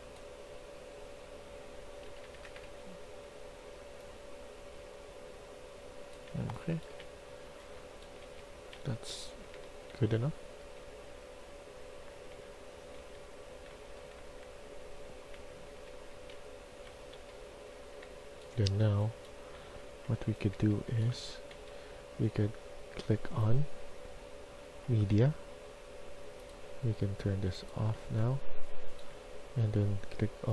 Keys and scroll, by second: 1.7-3.0 typing, 6.3-8.0 typing, 8.2 Escape, 9.4-10.7 typing, 12.0-17.9 typing, 19.5-21.0 typing, 27.9-28.9 s.